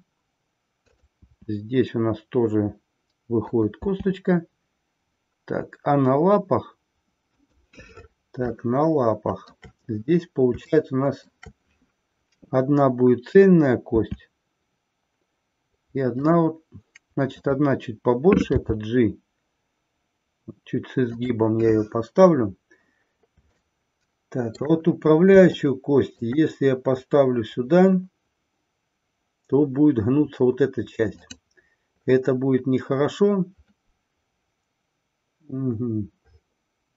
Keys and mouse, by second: 3.5 click, 3.8 e, 8.7 shift+middle click, 10.7-11.3 shift+middle drag, 21.1 click, 23.7-24.8 shift+middle drag, 25.7-26.3 shift+middle drag.